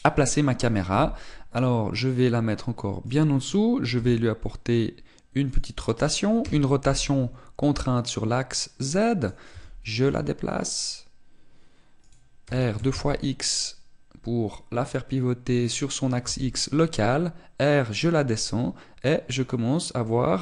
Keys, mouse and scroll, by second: 1.7 g, 3.8 click, 4.7 r, 6.2 click, 7.1 r, 9.9 click, 10.2 g, 12.8 click, 13.1 r, 16.4 click, 16.9 g, 20.1 click.